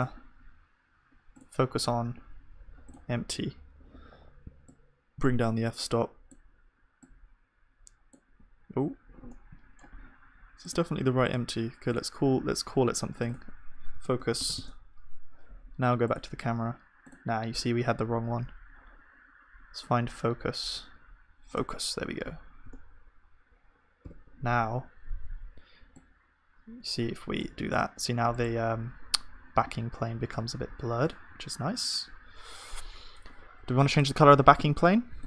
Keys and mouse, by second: 0.0-3.4 drag, 4.8-8.7 middle drag, 8.7 click, 9.3-22.7 middle drag, 22.7 KP_0, 24.1 ctrl+s, 30.3 ctrl+s.